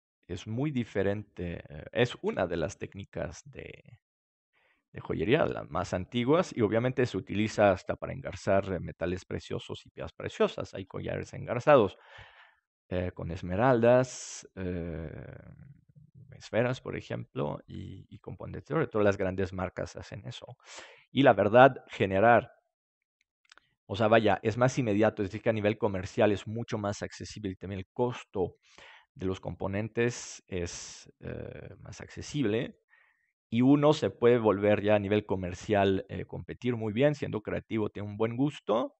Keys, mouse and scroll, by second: 1.4-3.5 middle drag, 2.2 ctrl+s, 5.7-14.8 middle drag, 21.1-25.5 middle drag, 31.6-36.1 middle drag.